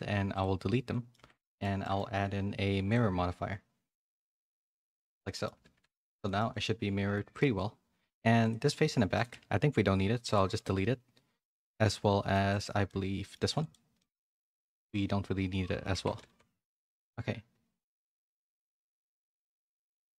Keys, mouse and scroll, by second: 0.9 middle click, 1.1 Tab, 1.4 shift+middle click, 2.9-4.8 drag, 5.2 middle click, 5.7 a, 5.8 shift+middle click, 6.5 middle click, 7.4 middle click, 8.4 click, 8.8 Tab, 9.0 3, 9.1 click, 9.3 x, 10.5-12.3 middle drag, 12.5 click, 12.8 middle click, 13.9-15.8 middle drag, 13.9 x, 15.9 Tab, 16.2 a, 16.3 a, 16.6-17.6 middle drag, 18.0 middle click, 18.3 a, 18.4 middle click, 18.8 shift+middle click, 19.1 middle click, 19.5 a.